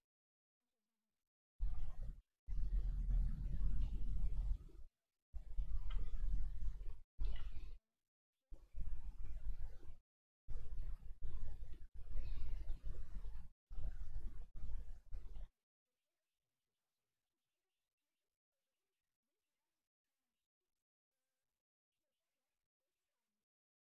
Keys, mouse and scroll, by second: 1.0 click, 1.1 middle click, 4.7 ctrl+z, 5.0 ctrl+z, 7.7 f, 9.5 middle click, 20.7-23.2 drag, 23.2 ctrl+z.